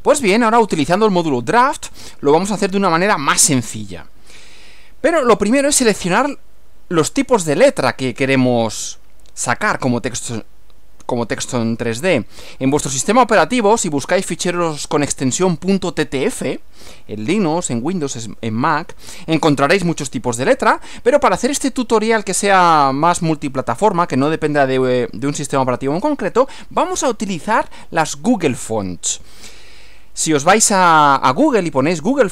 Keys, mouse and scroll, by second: 13.6 click.